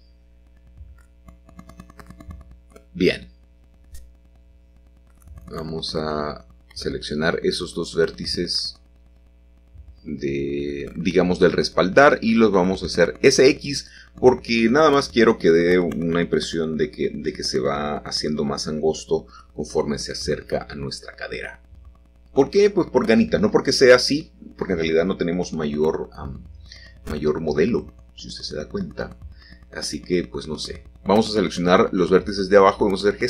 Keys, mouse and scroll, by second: 0.0-1.1 drag, 1.9 middle click, 2.5-4.1 shift+drag, 4.1 middle click, 5.8-9.9 drag, 9.9 middle click, 10.7 s, 10.9 x, 13.3-15.4 drag, 15.4 middle click, 17.6-18.7 drag, 18.9 l, 21.5 middle click, 22.6-23.2 typing, 24.6-25.6 drag, 25.6 typing, 28.2 click, 29.0 click, 29.4 shift+click, 30.3 shift+click, 30.8 shift+click, 31.6 g, 32.1 z.